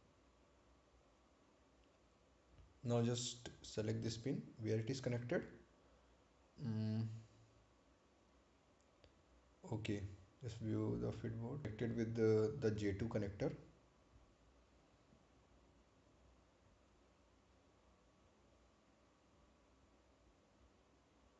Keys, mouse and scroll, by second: 0.7 scroll up 1, 3.2 ctrl+click, 10.6 click, 15.0-15.5 scroll up 1.